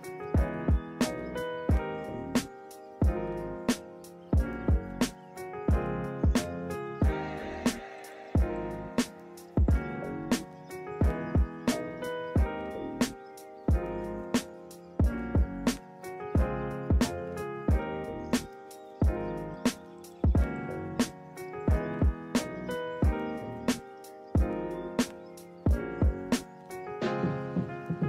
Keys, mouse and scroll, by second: 0.2 ctrl+-, 0.5 ctrl+=, 1.6 right click, 2.7 right click, 3.3 ctrl+=, 4.7 ctrl+-, 9.0 ctrl+-, 9.3 ctrl+=, 9.5 ctrl+-, 9.8 ctrl+=, 13.5 right click, 14.4 right click, 20.2 ctrl+z, 20.8 right click, 23.6 ctrl+z.